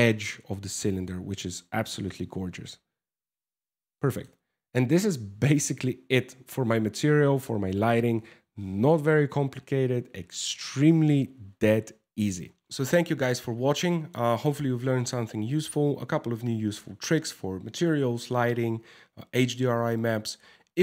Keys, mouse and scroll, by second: 0.4 shift+middle click, 2.5 ctrl+s, 2.6 scroll up 1, 3.1 scroll down 1, 3.5 shift+middle click.